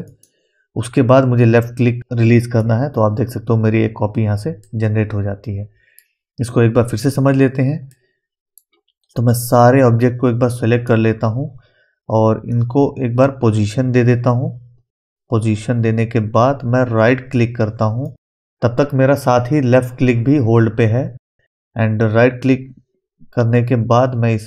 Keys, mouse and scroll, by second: 0.1 right click, 0.1-4.6 right drag, 4.6-9.6 middle drag, 9.6-18.4 drag, 18.0-24.4 right drag.